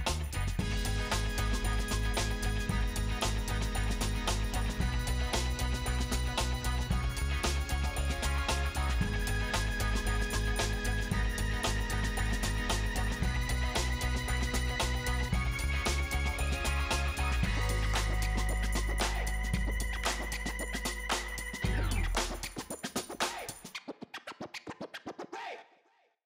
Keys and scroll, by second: 2.7 space, 26.0 space.